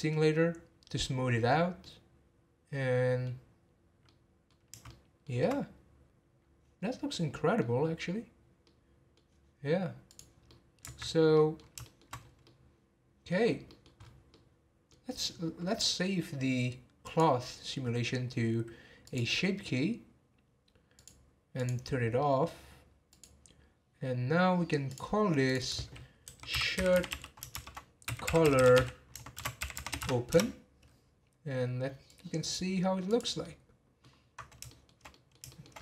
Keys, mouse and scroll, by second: 0.7-1.8 scroll down 3, 1.8-3.4 middle drag, 3.4-4.0 scroll down 1, 4.0-6.8 middle drag, 6.8 scroll down 1, 7.1-10.2 middle drag, 10.2 click, 10.4-11.0 middle drag, 11.0 scroll up 3, 11.3-12.2 middle drag, 12.2 scroll down 1, 12.4-13.5 middle drag, 13.5 scroll down 2, 13.7 middle drag, 14.0-14.3 scroll up 2, 14.3-17.0 middle drag, 17.0-20.1 drag, 21.0 click, 21.5 click, 22.2 middle click, 23.1 click, 24.0 scroll down 1, 24.9 click, 25.5-28.5 drag, 32.1-33.1 drag, 33.4-35.7 middle drag, 35.7 scroll up 1.